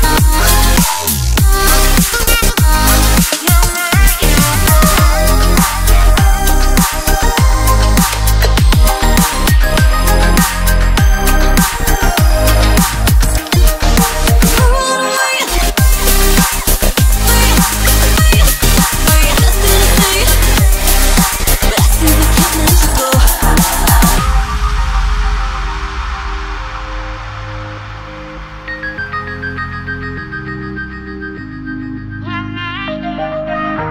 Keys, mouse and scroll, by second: 0.7 click, 2.1 Tab, 3.4 click, 4.6 shift+s, 10.0 click, 10.9 2, 12.3 click, 15.2-18.3 drag, 18.6 r, 20.5-23.6 drag, 24.0 Tab, 25.1 click, 26.1 Tab, 27.5 click, 29.2-31.0 right drag, 31.0 1, 31.5 click, 32.7 shift+s.